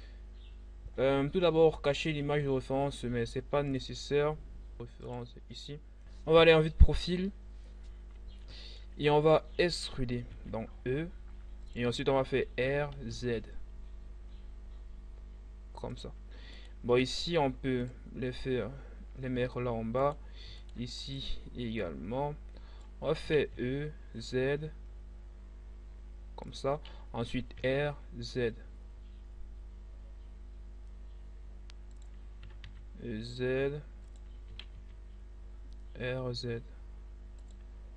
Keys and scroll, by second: 9.9 e, 12.6 r, 13.1 z, 22.8 e, 23.5 z, 27.2 r, 27.5 z, 32.0 e, 32.6 z, 34.5 r, 34.7 z.